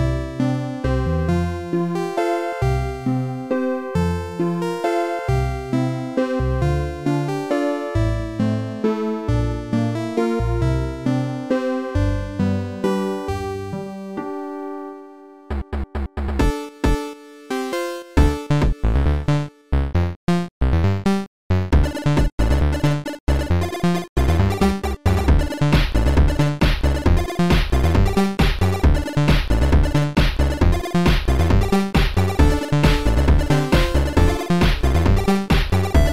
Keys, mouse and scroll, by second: 0.2 click, 0.9 click, 1.8 click, 4.8 click, 6.7 click, 7.9 click, 8.3 click, 9.0 click, 9.4 click, 11.3 click, 11.8 click, 12.7 click, 14.4 click, 17.6 click, 19.1 click, 21.1 click, 22.8 click, 25.4 click, 26.0 right click, 27.1 click, 31.8 click, 31.8 click, 31.8 right click, 32.7 click, 33.8 click, 35.8 click.